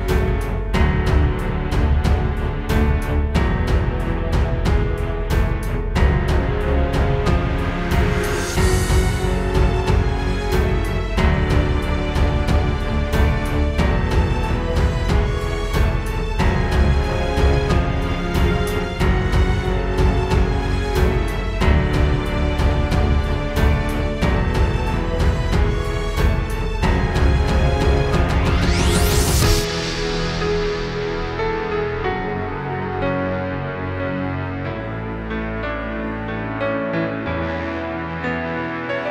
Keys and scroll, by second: 0.1 super+space, 0.2 super+space, 5.3 space, 6.2 space, 8.1 space, 8.8 space, 9.6 ctrl+alt+super+space, 9.8 ctrl+alt+super+space, 11.6 space, 14.4 space, 14.8 space, 15.6 super+], 16.7 space, 17.0 space, 17.8 super+space, 30.2 space, 30.7 alt+super+space, 31.2 space, 32.8 space, 35.5 super+z, 35.9 space.